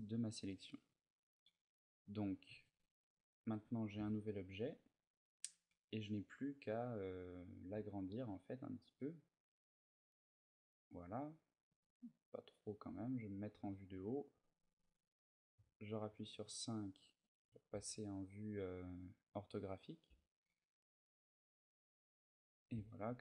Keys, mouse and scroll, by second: 0.3 middle click, 2.3 Tab, 2.8 middle click, 3.3 middle click, 4.0 ctrl+middle click, 4.7 middle click, 7.5 s, 10.2 click, 10.5 middle click, 11.5 s, 12.4 click, 13.4 KP_7, 13.7 z, 15.3 KP_5, 16.5 ctrl+middle click, 17.5 s, 22.3 shift+click, 23.1 middle click.